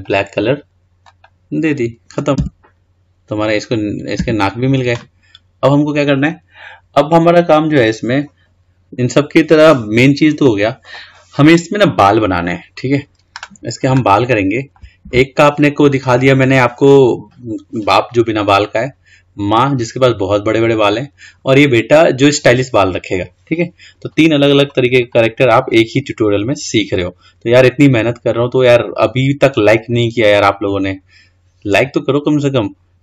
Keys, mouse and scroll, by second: 0.1 click, 1.2-2.6 drag, 2.6 Tab, 4.3 Tab, 8.0-10.2 scroll down 7, 10.7-11.5 scroll up 7, 11.5-12.8 scroll down 2, 12.8-14.4 scroll up 2, 14.4 shift+middle click, 15.2-18.3 scroll down 2, 19.1 scroll down 3, 21.5-22.7 scroll up 8, 22.7-23.4 scroll down 2, 23.4-25.2 scroll down 1, 25.2 click, 25.9-29.0 scroll down 2, 32.5-32.9 scroll down 3, 32.9-33.0 scroll up 6.